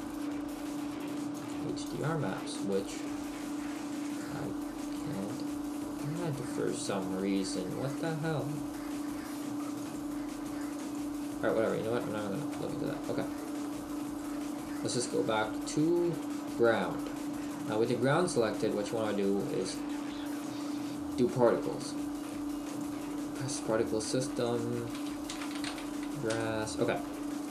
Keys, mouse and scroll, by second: 1.4 click, 10.5 click, 12.6 middle click, 13.7 middle click, 14.2 right click, 16.0-17.5 scroll down 2, 17.5 right click, 19.7 click, 22.7 click.